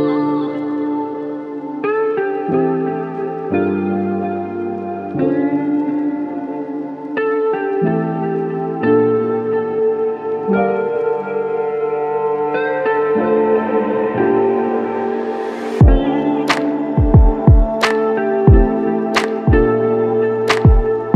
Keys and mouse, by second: 0.2 shift+click, 0.7 shift+double click, 1.0 shift+click, 2.9 alt+click, 5.6 alt+shift+click, 11.5 typing, 13.6 ctrl+alt+click, 20.6 alt+click.